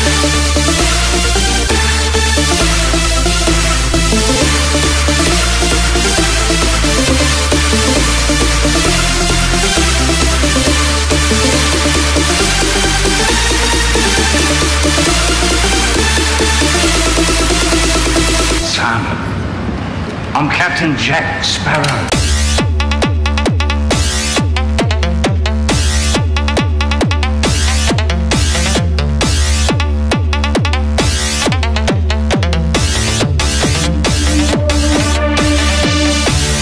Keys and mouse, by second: 11.3-14.7 drag, 17.3-21.3 drag, 24.0 s, 31.3-36.6 middle drag.